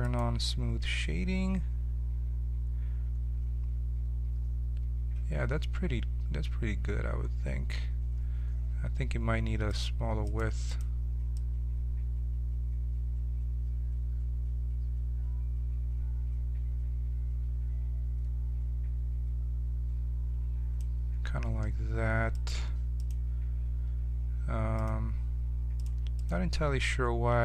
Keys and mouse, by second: 0.7-1.8 drag, 0.7 t, 1.6 middle click, 1.6 right click, 2.7 middle click, 9.6-13.4 drag, 22.3-27.4 drag.